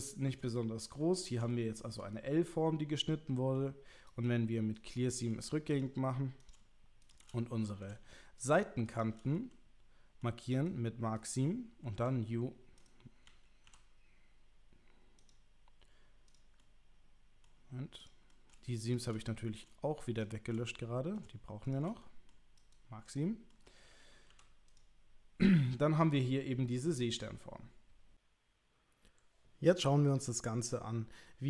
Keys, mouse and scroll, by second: 0.6 shift+middle click, 1.6 shift+click, 4.2-4.9 right drag, 5.3 middle click, 5.8 click, 6.5 click, 7.1 shift+click, 7.4 middle click, 9.3 middle click, 10.6 right click, 11.9 u, 12.9 right drag, 13.3 l, 13.6 u, 16.6 middle click, 18.3 middle click, 18.9 shift+click, 19.2 middle click, 20.7 middle click, 21.6 shift+click, 22.0 middle click, 22.7 middle click, 23.5 click, 23.9 l, 24.3 u.